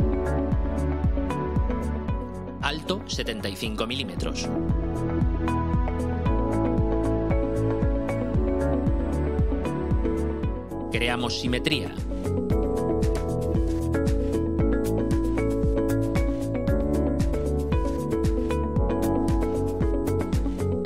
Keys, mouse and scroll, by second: 0.1 7, 0.6 5, 1.2 Return, 6.2-7.2 drag, 7.4 click, 8.2-9.6 drag, 13.4 click, 14.4 scroll up 1, 15.0-16.2 right drag, 18.9-19.9 drag.